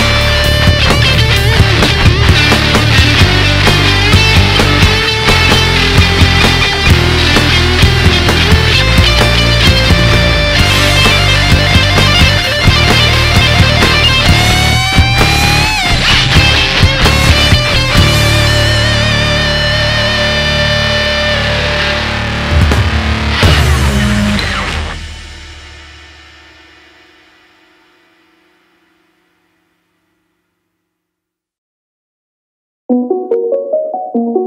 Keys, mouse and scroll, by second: 6.7 KP_1, 7.1-7.6 scroll down 2, 7.6-8.2 scroll up 1, 8.2 Tab, 8.7 alt+z, 9.1-9.9 middle drag, 9.9 scroll down 3, 10.2-11.9 middle drag, 11.9 KP_1, 12.1-12.5 scroll down 2, 12.5-13.4 shift+middle drag, 13.4 KP_3, 14.1 KP_1, 14.9-17.4 shift+middle drag, 17.4-17.9 scroll up 1, 17.9 shift+middle click, 18.2 KP_1, 18.5-18.9 scroll down 1, 18.9-21.3 shift+middle drag, 21.3 drag, 22.6-23.9 middle drag, 23.9-24.3 scroll up 2, 24.3 Tab, 24.7 middle click, 25.3 alt+z, 25.7-27.0 middle drag, 27.0 alt+click, 27.8 alt+shift+click, 28.9 alt+shift+click, 29.7 alt+shift+click, 30.3-32.7 middle drag, 32.7 alt+shift+click.